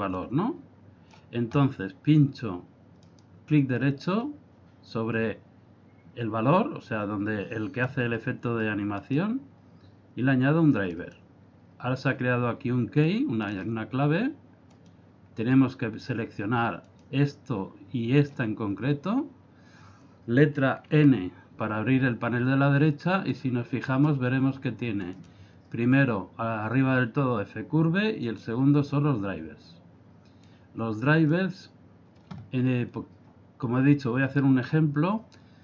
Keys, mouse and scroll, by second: 0.1 click, 3.0 right click, 6.9 click, 9.0 right click, 13.1 click, 14.8 click, 16.9 click, 18.2 click, 20.9 n, 23.3 click, 25.1 click, 25.3 click, 28.3 click, 30.5 click.